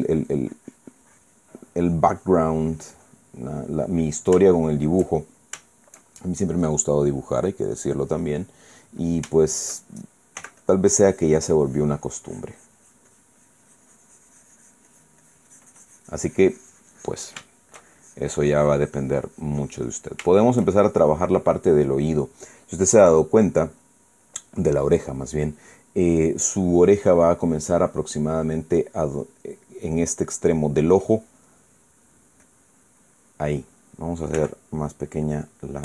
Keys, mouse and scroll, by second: 2.3 click, 4.2 middle click, 5.3 shift+middle click, 5.9 shift+middle click, 6.4 shift+middle click, 7.4 shift+middle click, 8.8 middle click, 9.6-10.4 middle drag, 11.1 f, 11.3 click, 11.7-18.0 drag, 18.2 shift+middle click, 18.7-21.0 shift+drag, 21.0 shift+middle click, 21.6 shift+middle click, 22.3 middle click, 33.1-34.4 drag, 35.1 f, 35.6 click.